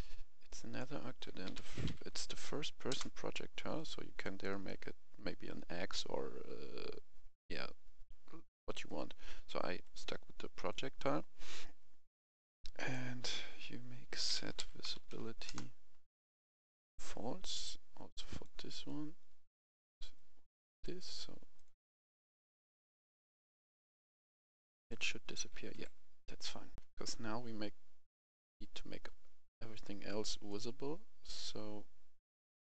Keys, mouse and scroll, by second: 0.5 click, 1.2-1.8 typing, 2.9 Return, 3.7 click, 4.5 right click, 7.6 scroll down 1, 8.5 right click, 9.8-11.3 drag, 14.1-14.9 typing, 15.4 Return, 16.3-21.3 drag, 25.7 Escape, 26.4 right click, 26.7 F11, 26.7 F10, 28.3 right click, 29.0-29.4 scroll down 1, 29.5 right click, 30.4-31.9 drag.